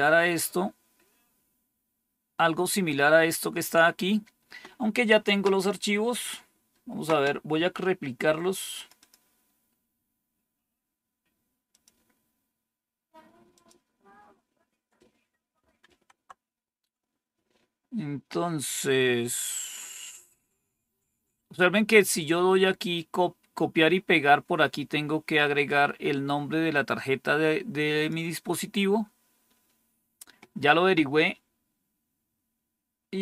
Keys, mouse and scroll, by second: 2.0-8.6 scroll down 1, 8.6 click, 8.9 click, 11.6 click, 13.4 click, 15.7 super+Tab, 25.5-28.0 drag.